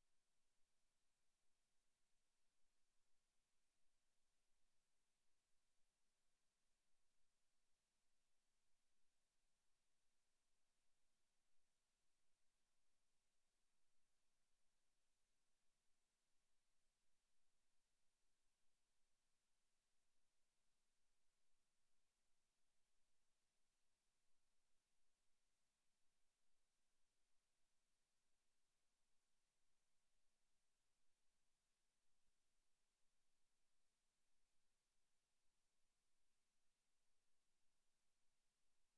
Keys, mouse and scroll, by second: 0.8 right click, 14.9 KP_0, 16.7 right click, 17.5 g, 21.5 click, 21.5 shift+f, 22.6 click, 23.1 shift+f, 24.9 click, 26.6 click, 28.1 shift+f, 30.3 click.